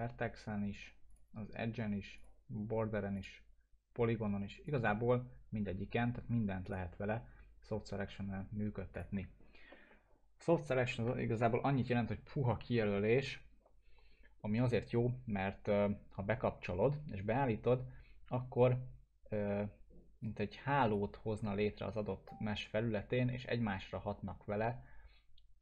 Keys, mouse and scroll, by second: 8.9 click, 9.7-10.9 alt+middle drag, 20.5-21.1 click, 21.5-25.6 alt+middle drag.